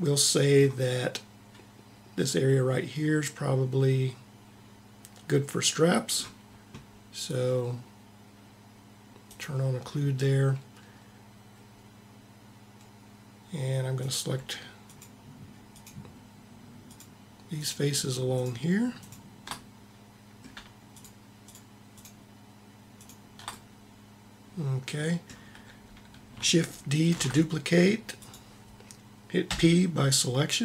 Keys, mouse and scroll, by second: 9.3-11.2 drag, 13.9-20.2 drag, 27.1 shift+d, 29.6 p.